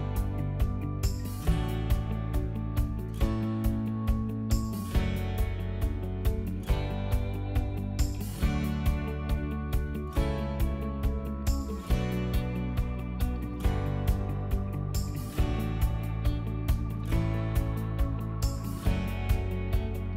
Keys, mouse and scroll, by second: 0.0 middle click, 0.9 c, 1.4 click, 2.0 middle click, 3.0-5.4 drag, 6.6 middle click, 8.7 t, 9.1 click, 9.5 middle click, 10.8 click, 14.1 middle click, 15.2 click, 15.2 p, 17.3 middle click, 18.0 click.